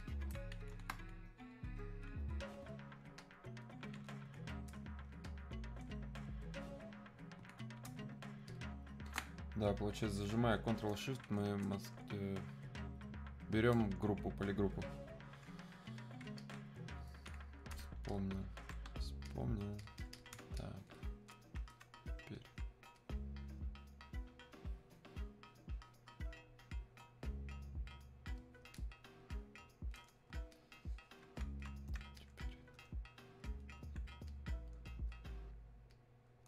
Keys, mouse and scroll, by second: 3.2 ctrl+shift+click, 8.5 ctrl+shift+click, 16.4-36.4 alt+drag.